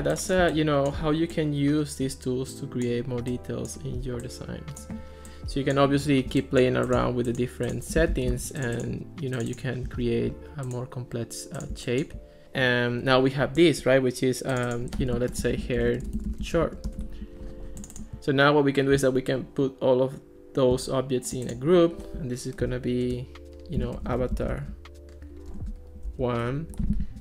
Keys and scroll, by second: 8.2 Escape, 15.1-17.4 typing, 20.8 super+g, 23.6-26.1 typing, 26.4 Return.